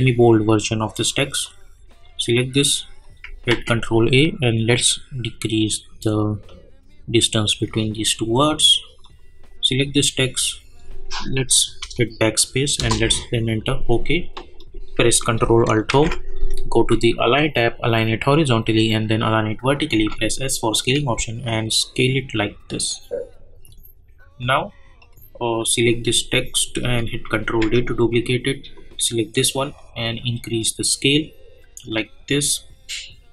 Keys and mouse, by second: 3.5 ctrl+a, 4.7-9.0 drag, 14.6 click, 15.9 ctrl+alt+Home, 17.3 click, 19.9 s, 20.7-25.0 drag, 27.4 ctrl+d, 28.7-32.3 drag.